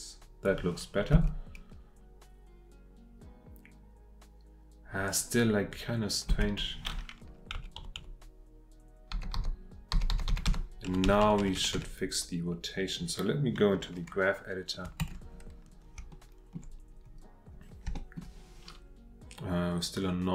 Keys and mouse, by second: 1.1 space, 6.3 space, 7.8 Right, 8.0 Right, 9.1 Left, 9.3-10.9 Left, 10.9 Right, 11.0 Right, 11.2 Right, 11.4 Right, 11.6 Right, 11.7 Right, 15.0 ctrl+Tab, 16.2 shift+middle click, 18.0 shift+click.